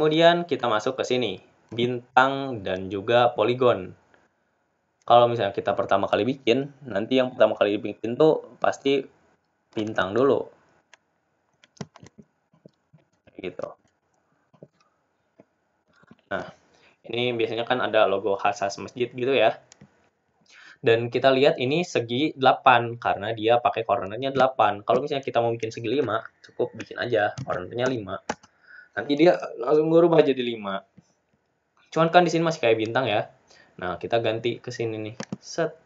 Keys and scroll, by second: 19.8 ctrl+z, 29.8 Return.